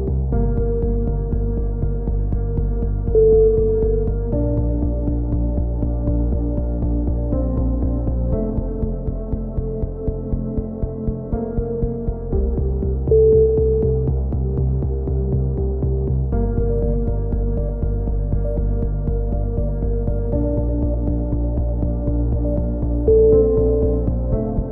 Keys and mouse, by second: 0.7 ctrl+r, 2.0 right click, 2.1 click, 2.4 right click, 2.9 f, 3.0 a, 3.4 ctrl+r, 3.8 a, 4.7 ctrl+r, 5.5 right click, 5.9 g, 7.0 click, 7.2 a, 7.6 click, 8.0 right click, 10.3-12.4 drag, 11.6 a, 12.4 right click, 12.5 f, 13.0 a, 15.2 a, 15.3 z, 18.2 z, 18.7 ctrl+r, 19.0 click, 19.7 click, 20.5 g.